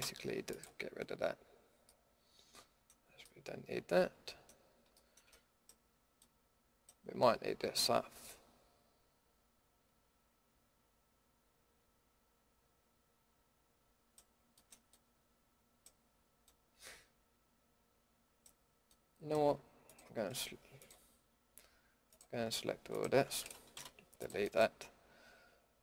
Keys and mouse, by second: 6.8-7.7 middle drag, 7.9-9.7 middle drag, 14.4-14.9 middle drag, 19.8-22.9 drag, 23.7 Delete, 24.2 Delete.